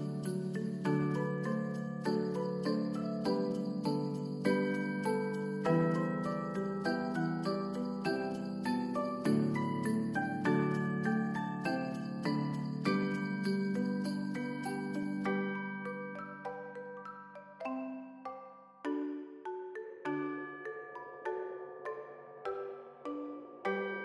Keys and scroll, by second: 8.4 ctrl+d, 14.3 ctrl+s, 22.1 ctrl+s, 22.9 space.